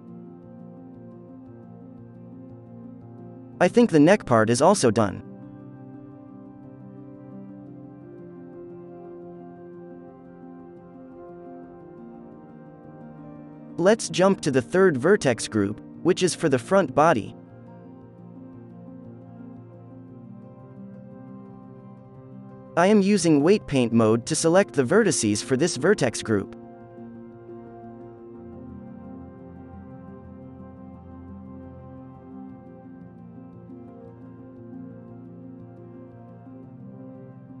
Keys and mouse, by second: 0.0 z, 0.7 alt+a, 1.7 middle click, 1.9 ctrl+s, 2.3 click, 2.8 ctrl+s, 3.7 ctrl+s, 13.4-15.8 drag, 13.4 middle click, 13.4 right click, 16.8 Tab, 16.9-19.6 middle drag, 17.9 alt+a, 18.3 b, 19.7-21.6 middle drag, 20.4 b, 20.9-22.6 right drag, 21.6-27.8 drag, 22.3 Tab, 23.2 Tab, 24.0 f, 28.5-32.2 drag, 29.1 f, 30.0-31.8 middle drag, 30.2 f, 33.2-35.0 middle drag, 33.5 f, 33.8-37.6 drag, 35.6-37.6 middle drag, 36.1 f, 37.1 f.